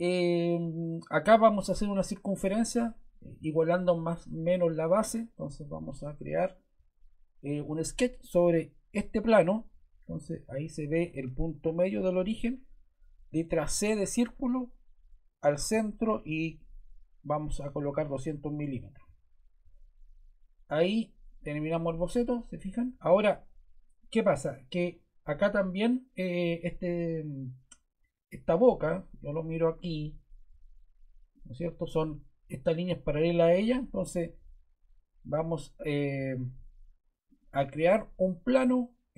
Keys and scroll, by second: 13.6 c, 17.2-18.1 typing, 18.5 Return.